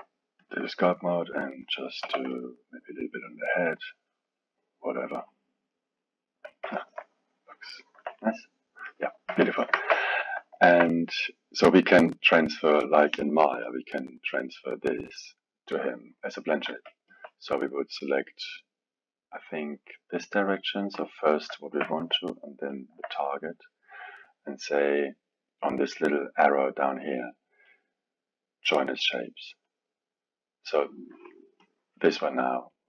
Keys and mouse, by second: 2.0 f, 2.6-8.2 drag, 8.2-9.3 middle drag, 9.3 KP_1, 9.7 ctrl+Tab, 10.5-13.6 alt+middle drag, 16.6 drag, 20.9 click, 22.7 shift+click, 24.2-29.6 drag, 29.7 click, 31.6-32.8 drag.